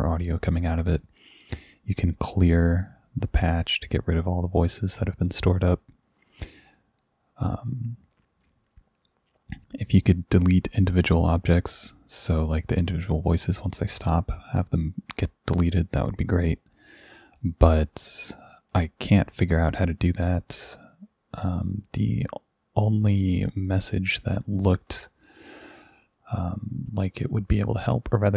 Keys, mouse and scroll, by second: 18.6 click, 21.4 click, 22.9 click.